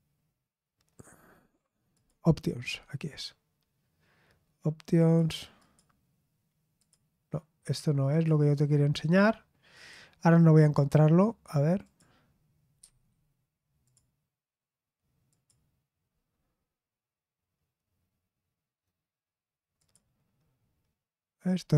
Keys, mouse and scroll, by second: 1.9 click, 4.9 click, 5.6 click, 6.7 click, 8.1 click, 9.7 click, 10.6 click, 11.8 click, 12.8 Escape, 13.8 click, 15.3 click, 19.7 click.